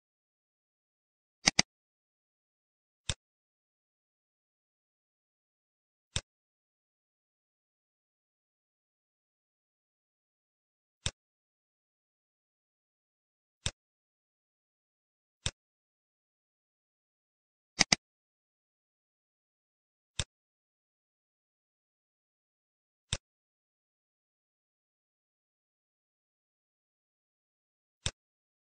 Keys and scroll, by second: 12.4 ctrl+c, 12.5 ctrl+c, 21.2 ctrl+v.